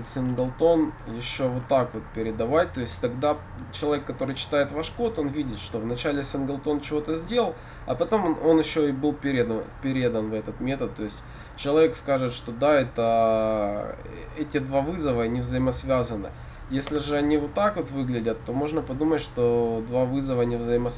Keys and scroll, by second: 0.4 ctrl+c, 1.6 ctrl+v.